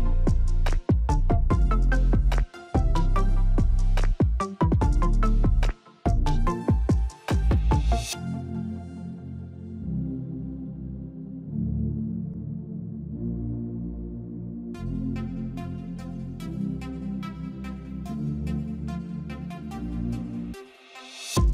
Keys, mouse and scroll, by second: 6.1 alt+click, 7.7 ctrl+click, 10.1-21.5 drag.